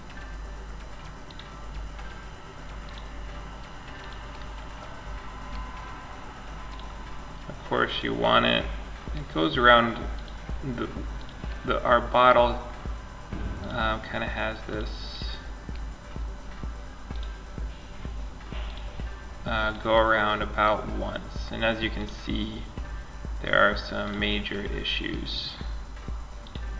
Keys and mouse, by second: 11.4-13.4 drag, 19.1-22.0 drag.